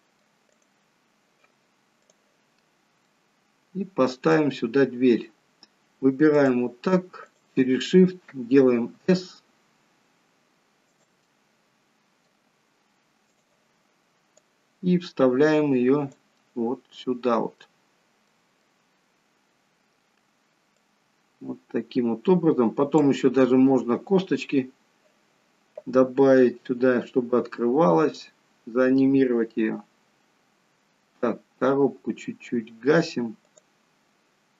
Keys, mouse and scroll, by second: 0.7 click, 2.2 click, 3.1 middle click, 4.4 middle click, 5.6-6.4 scroll up 3, 6.4 click, 7.6 shift+click, 8.8 s, 11.3 middle click, 13.3 click, 16.5 middle click, 18.3 middle click, 19.1-19.7 scroll up 3, 20.9 click, 20.9-21.4 scroll up 3.